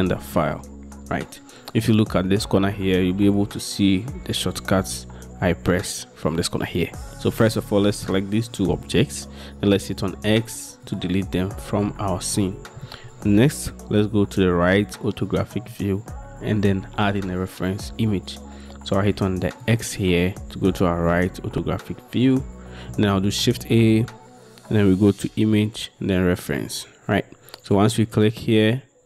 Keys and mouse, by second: 3.4 middle click, 3.7 middle click, 4.9 d, 7.6-8.2 drag, 10.1 x, 23.4 shift+a.